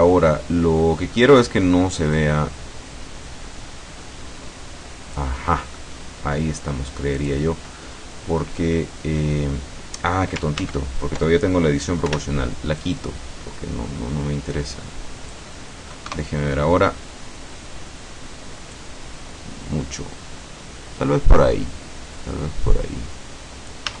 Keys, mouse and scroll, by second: 2.2-5.4 drag, 5.5 middle click, 7.2 click, 10.7 ctrl+z, 12.2 o, 12.9-15.6 drag, 16.2 KP_0, 18.9-24.0 drag.